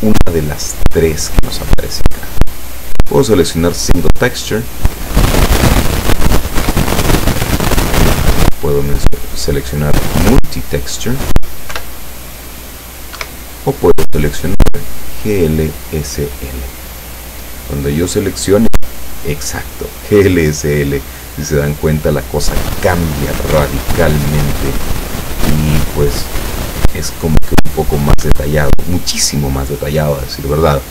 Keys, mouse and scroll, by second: 4.4 click, 6.7 p, 8.3 Escape, 9.1 click, 10.4 click, 11.8 p, 13.2 Escape, 14.5 click, 15.4 click, 23.5 p, 28.2 Escape.